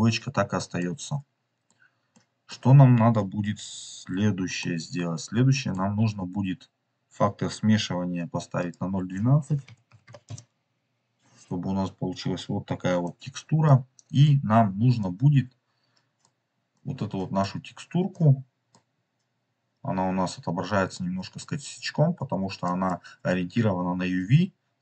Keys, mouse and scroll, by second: 0.7 middle click, 2.1 middle click, 4.5 scroll up 1, 4.5-5.7 middle drag, 6.3-7.6 scroll up 3, 8.5-10.9 drag, 12.9-16.2 middle drag, 16.8 middle click, 18.2-18.7 middle drag, 18.8 scroll up 2, 19.5 middle click, 19.6-19.9 scroll down 3, 19.9 scroll up 3, 20.8 middle click, 22.1-22.6 scroll up 2, 22.6 middle click.